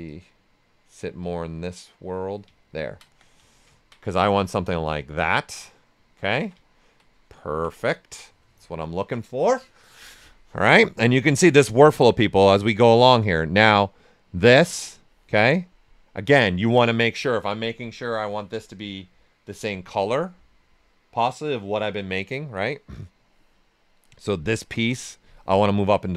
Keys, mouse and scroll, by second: 0.0-2.6 drag, 2.6 ctrl+right click, 3.0 ctrl+q, 3.5 alt+right click, 3.9 ctrl+right click, 7.4 ctrl+right click, 11.3-15.4 drag, 11.3 typing, 15.4 right click, 18.0 click, 23.5 right click, 24.5 click, 25.7-26.1 right drag.